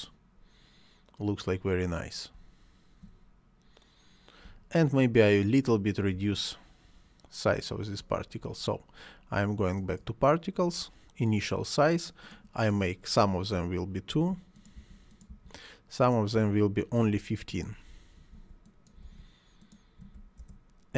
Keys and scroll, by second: 2.3 space, 4.4 space, 8.0 Escape, 14.1 2, 16.3 1, 17.9-18.9 typing, 20.4 Return.